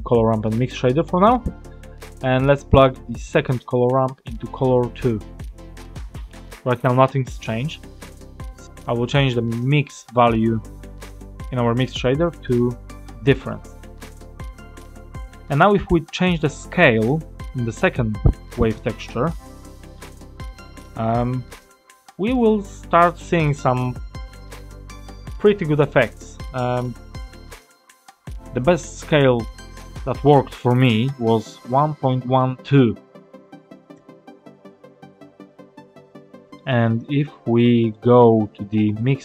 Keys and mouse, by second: 0.7 middle click, 3.9-5.2 drag, 11.7-13.3 drag, 14.8 middle click, 18.5 middle click, 19.5 middle click, 20.5 click, 30.1-35.2 drag, 36.4 middle click, 37.6 middle click, 39.0 middle click.